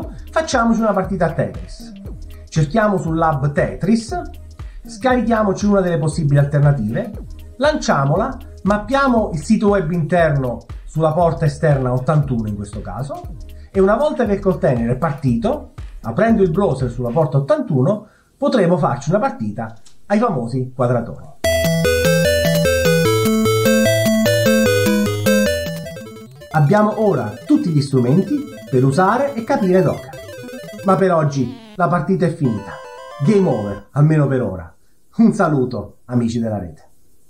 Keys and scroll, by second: 2.9-3.6 typing, 4.4-5.4 scroll down 3, 9.8-10.8 scroll up 2, 11.0 1, 19.6 space, 22.1 Down, 22.3 Down, 22.6 Left, 23.3 Right, 23.6-24.7 Down, 25.9-26.2 Left, 26.2 Down, 26.3 Down, 26.7 Left, 26.8 Left, 26.8 Right, 26.9 Down, 27.2 space, 27.5 Right, 27.6 Up, 28.0 Left, 28.2 Down, 28.2 Down, 28.3 Down, 28.6 Left, 29.0 Right, 29.2-31.2 Down, 30.1 Right.